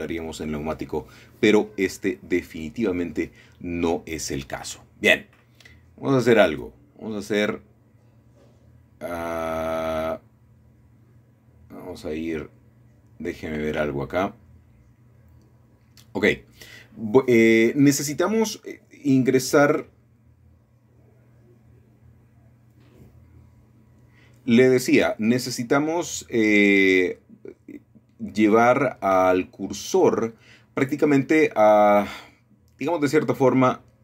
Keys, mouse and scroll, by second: 0.0-1.1 scroll up 2, 1.1 shift+middle click, 2.0 shift+middle click, 2.4-3.4 scroll down 1, 3.6 scroll up 1, 3.7-4.4 scroll down 1, 6.1-7.2 scroll up 2, 8.4 shift+a, 10.8 click, 14.4 shift+a, 15.7 ctrl+z, 16.3 ctrl+z, 17.0 ctrl+shift+s, 17.8 scroll up 1, 17.9-18.4 scroll down 1, 18.4 shift+middle click, 19.4 shift+click, 20.6 right click, 24.5-25.5 scroll up 2, 25.4-27.4 shift+middle drag, 30.2 middle click, 32.9 shift+s.